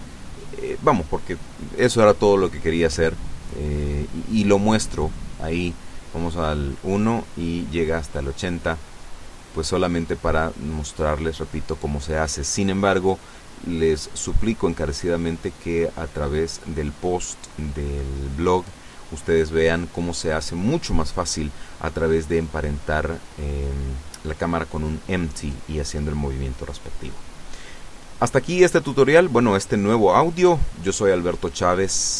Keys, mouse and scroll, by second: 0.6 click, 0.9-2.5 scroll up 1, 2.6 i, 3.3 click, 5.9 click, 6.8 alt+a, 10.6 Escape, 13.5 click, 14.4 KP_8, 14.6 KP_0, 14.7 KP_Enter, 17.3 alt+a.